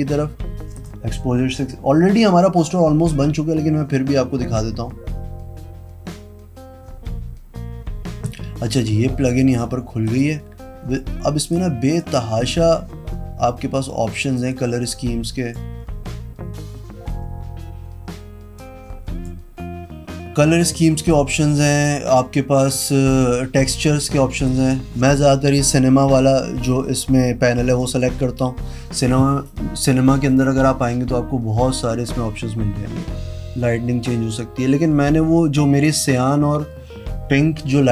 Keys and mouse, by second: 0.9 click, 10.3 click, 11.7 click, 14.5 click, 18.7 click, 22.9 click, 23.4 click, 24.7 click, 25.8 click, 27.9 click.